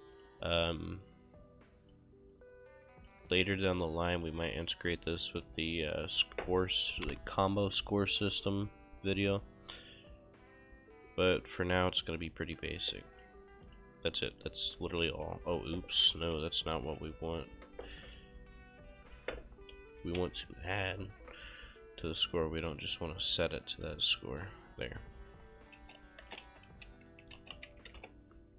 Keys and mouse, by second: 0.2 click, 2.3 click, 5.2 shift+click, 5.5 q, 5.6 click, 12.6 click, 13.7 click, 15.2 c, 15.8 Escape, 16.4 click, 17.0 Delete, 17.0 KP_Decimal, 18.5 ctrl+click, 20.0 shift+=, 21.0 click, 22.0 ctrl+click, 23.4 click, 25.8-28.4 typing.